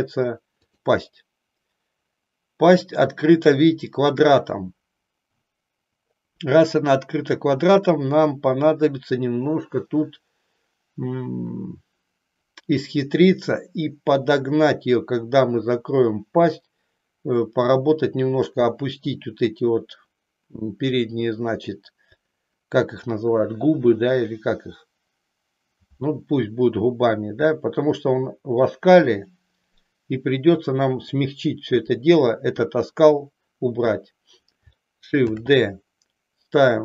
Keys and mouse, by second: 35.3 shift+d.